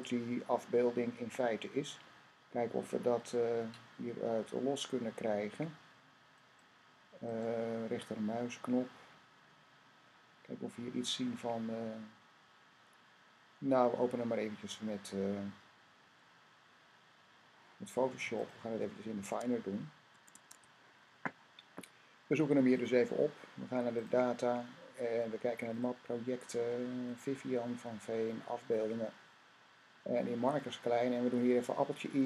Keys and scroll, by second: 19.1 Tab, 19.9 Tab.